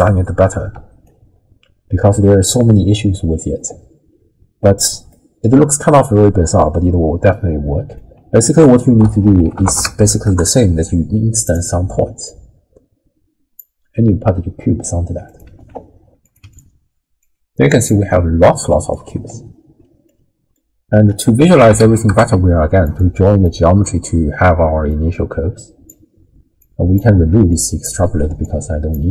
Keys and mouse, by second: 0.7 d, 1.0-2.2 drag, 2.1 d, 2.2 d, 3.0 d, 5.2-6.0 drag, 7.7 click, 8.5 ctrl+a, 12.2-13.6 drag, 15.5 ctrl+x, 16.2 click, 17.2 click, 18.4 drag, 18.5 middle click, 20.1 click, 21.1 ctrl+a, 23.3 click, 24.9-25.9 drag, 26.6 click, 27.1 ctrl+x, 27.7 click, 28.0 ctrl+x, 28.4 click.